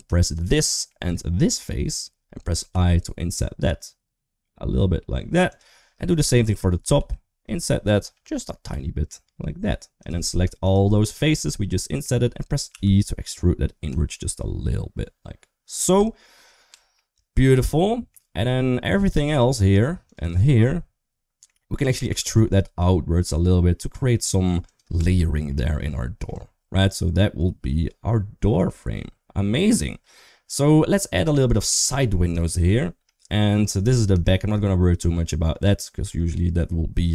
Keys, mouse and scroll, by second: 0.7 middle click, 2.5 i, 6.2 shift+click, 6.8 u, 8.5 i, 10.8 shift+click, 11.4 middle click, 12.5 e, 16.5 Tab, 16.7 middle click, 17.4 Tab, 17.7 middle click, 18.6 3, 18.8 click, 19.0 click, 19.9 shift+click, 20.0 shift+click, 20.5 middle click, 21.9 e, 24.8 Tab, 25.3 middle click, 26.1 Tab, 26.6-28.5 middle drag, 30.5 middle click, 31.2 shift+middle click, 31.5 3, 31.7 click, 32.2 shift+middle click, 32.8 middle click, 34.0 shift+middle click, 34.4 middle click, 35.5 shift+middle click.